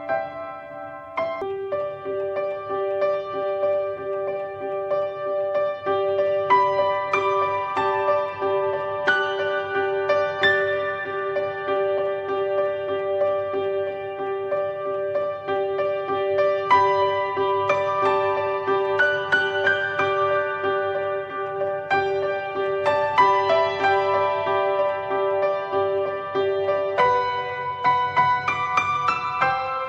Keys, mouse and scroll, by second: 0.4-3.7 drag, 3.7 scroll down 1, 4.0 middle click, 4.4 scroll up 2, 5.2 middle click, 5.3-6.4 scroll up 1, 6.4-7.3 drag, 7.5-7.9 scroll down 1, 7.9-8.5 shift+middle drag, 8.5 click, 8.7-11.0 middle drag, 11.9 shift+a, 12.3-13.0 scroll up 2, 13.0-14.2 shift+middle drag, 14.2 click, 14.9 scroll down 3, 15.2-16.3 middle drag, 16.3 click, 17.5-19.3 drag, 19.5-20.4 middle drag, 20.4-22.0 scroll up 1, 22.0 click.